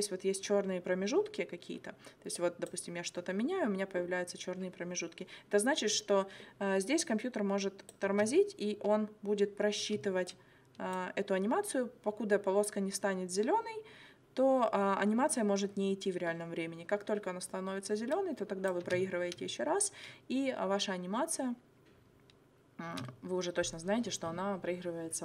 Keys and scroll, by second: 8.1 space, 9.9 space, 18.9 space, 22.9 space.